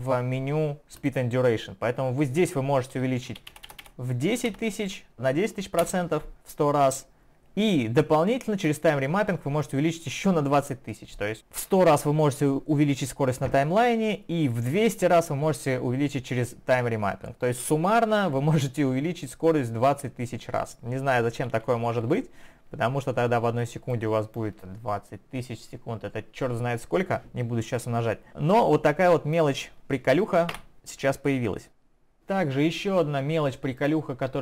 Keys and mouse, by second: 1.0 click, 22.8 typing, 23.9 click, 23.9 typing, 29.3 click, 30.5 Delete, 32.1 click, 33.8 click.